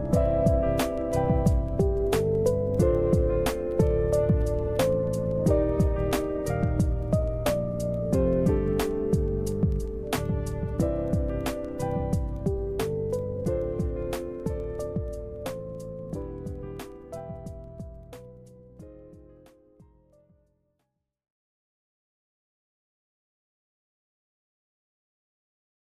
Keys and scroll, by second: 6.0 Left, 7.2 ctrl+g, 12.7 [, 16.5 Down.